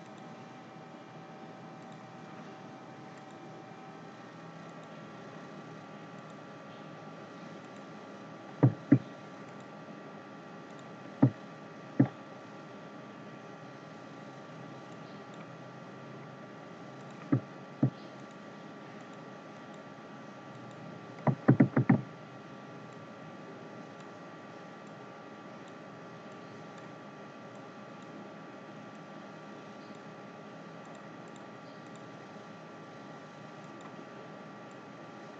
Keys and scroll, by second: 21.4 ctrl+z.